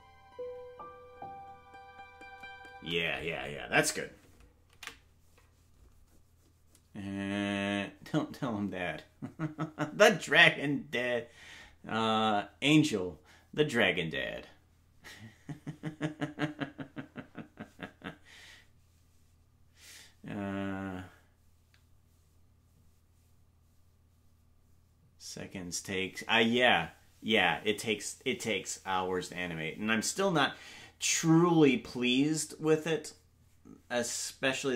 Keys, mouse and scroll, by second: 2.8 space, 6.6 ctrl+s.